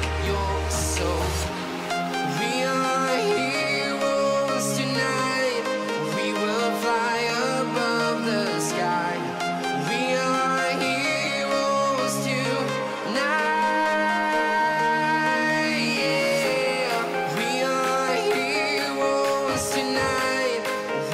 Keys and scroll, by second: 20.2 shift+n.